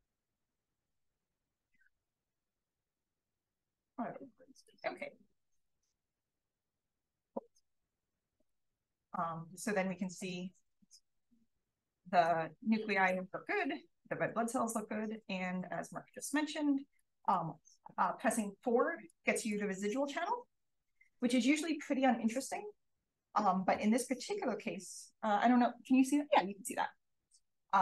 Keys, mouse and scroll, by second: 1.7 click, 2.2 click, 3.5 click, 4.6 click, 5.5 click, 6.8-8.4 drag, 16.5-17.3 scroll down 1, 16.9 click, 19.1-19.4 drag, 23.1 click.